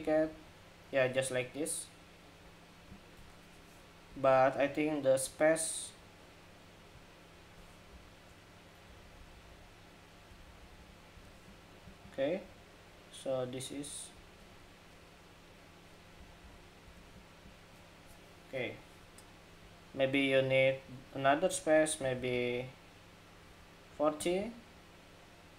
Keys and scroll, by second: 7.6 alt+Down, 8.6 alt+Down, 8.8 alt+Down, 8.9 alt+Down, 9.1 alt+Down, 9.2 alt+Down, 10.0 alt+Up, 10.2 alt+Up, 10.3 alt+Up, 10.5 alt+Up, 10.9 alt+Up, 15.9 alt+Down, 16.1 alt+Down, 16.6 alt+Up, 21.7 alt+Down, 21.9 alt+Down, 22.0 alt+Down, 22.2 alt+Down.